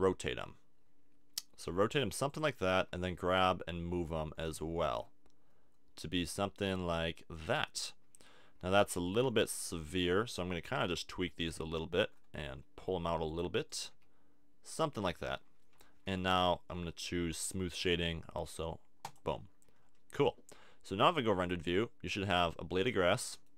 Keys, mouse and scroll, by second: 2.4 click, 2.7 g, 7.4-9.2 drag, 9.0 g, 10.3 click, 11.3 g, 13.9 g, 16.0 a, 16.3 Tab, 19.8 click, 21.1 click, 21.8-23.3 drag, 23.3-23.5 middle drag.